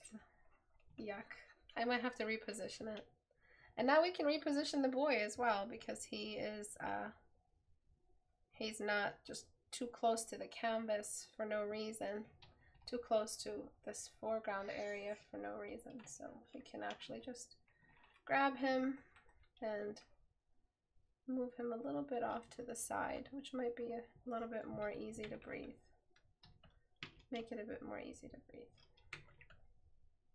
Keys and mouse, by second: 6.1 right click, 8.0 right click, 11.3 right click.